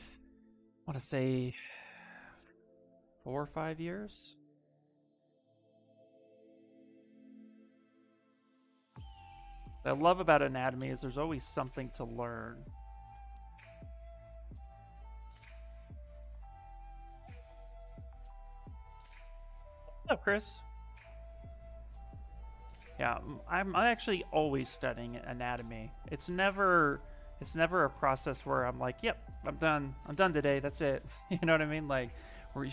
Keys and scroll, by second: 8.1 s, 10.9 s.